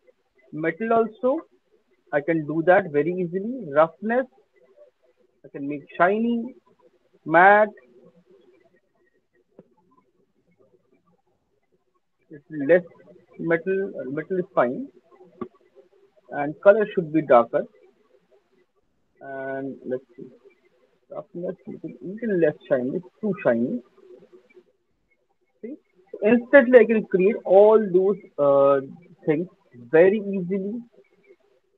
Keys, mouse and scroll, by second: 0.8 alt+click, 2.5 click, 3.5 click, 7.6 click, 8.8 click, 10.9 alt+click, 16.0 click, 16.8 click, 19.0 click, 20.1 click, 24.6 click, 25.7 alt+right click, 26.1 alt+middle click, 27.3 alt+click, 27.7 alt+middle click, 28.1 alt+click, 29.2 alt+click, 30.5 alt+click, 31.0 click, 31.6 click.